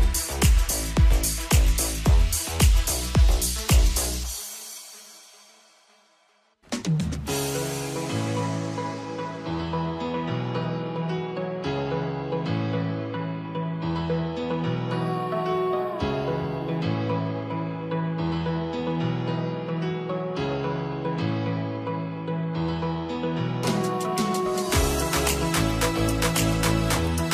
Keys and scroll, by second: 2.5 ctrl+t.